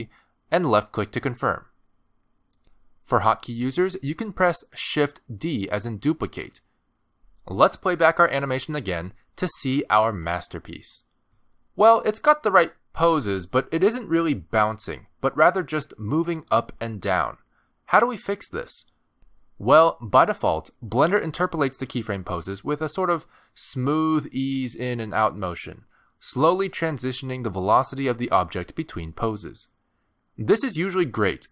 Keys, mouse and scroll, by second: 4.9 shift+d, 9.7 space, 11.9-12.4 scroll down 2, 12.5 shift+middle click, 12.9-13.3 scroll down 1, 13.3 middle click, 14.0 middle click.